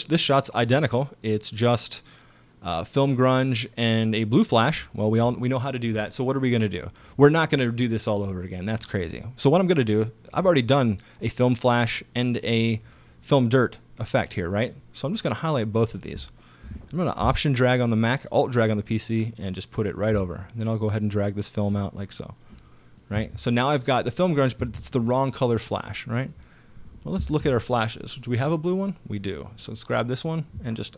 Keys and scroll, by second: 23.2 space, 24.6 space.